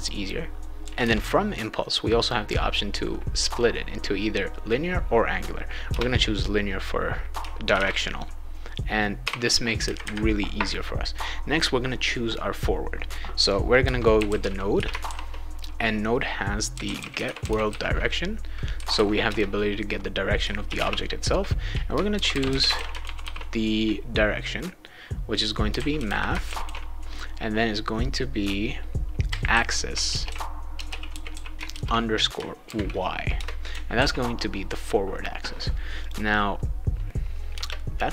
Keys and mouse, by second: 5.9 Return, 7.4-9.2 typing, 13.6-18.2 typing, 19.3 Return, 20.4-23.7 typing, 25.4-27.1 typing, 29.0-32.6 typing, 33.3 Return, 33.9 ctrl+s, 36.0 click, 37.5 Return.